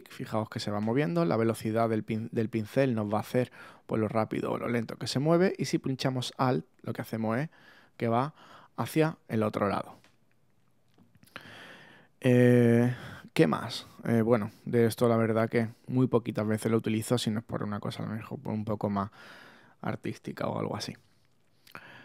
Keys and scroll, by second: 0.4 super+z, 4.7 super+z, 5.6 alt+super+z, 7.3 alt+z, 7.8 super+z.